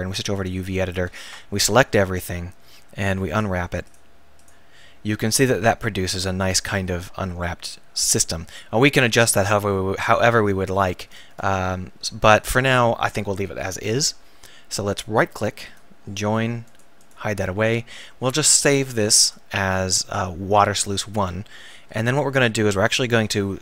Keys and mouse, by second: 1.1 click, 1.3 a, 4.5-8.6 drag, 16.8 right click, 18.5 ctrl+s, 22.0 KP_1.